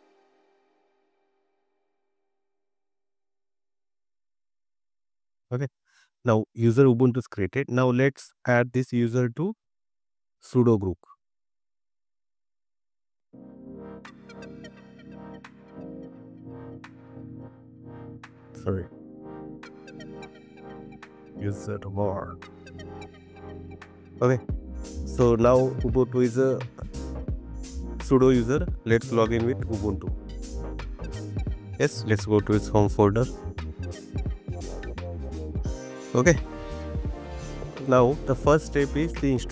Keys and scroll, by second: 16.1 Up, 17.3 Left, 19.4 BackSpace.